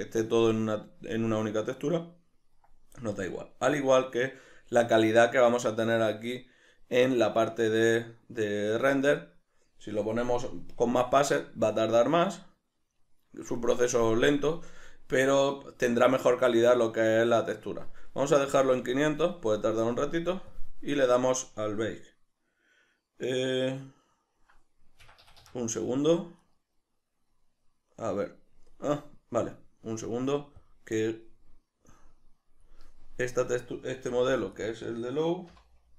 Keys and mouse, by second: 2.5-8.7 middle drag, 8.7-18.8 drag, 18.6 Escape, 18.8-20.5 middle drag, 20.5 click, 25.0 Escape, 26.4 right click, 30.6 click, 31.8-34.7 drag, 34.1 g, 34.7 right click, 35.5 F2.